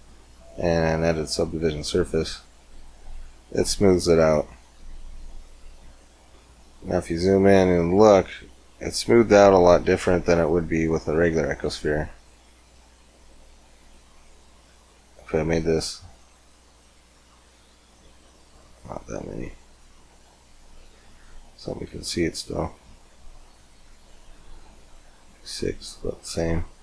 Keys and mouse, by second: 0.0-1.9 drag, 1.9-2.9 middle drag, 2.9-5.5 drag, 4.7 Tab, 5.7 Tab, 12.0 shift+a, 15.3-21.0 drag, 21.0 middle click, 21.8 g, 26.3 g.